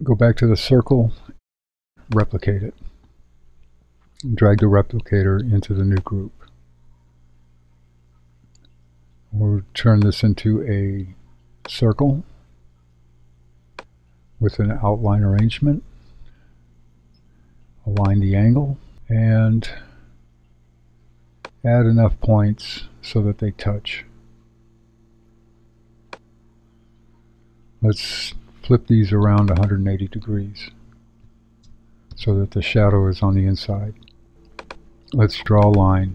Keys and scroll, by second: 30.6-32.1 typing.